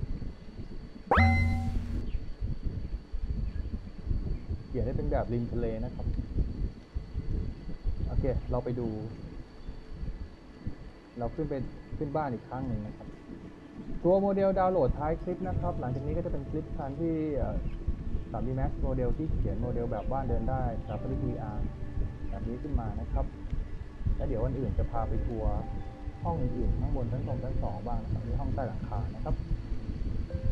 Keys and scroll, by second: 3.9 d, 7.5 w, 9.2 F3, 9.8 w, 15.6-16.5 typing, 17.6 a, 18.5 w, 21.3 d, 22.0 w, 22.3 d, 23.2 w, 30.4 w.